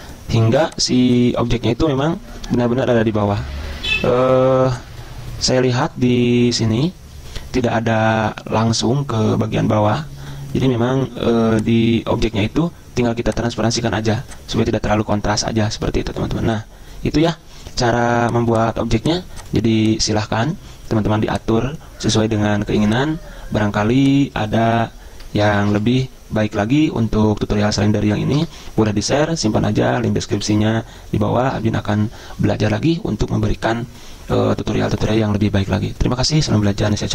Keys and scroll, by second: 1.8 ctrl+z, 25.2-26.2 typing, 28.3 BackSpace, 31.5 5.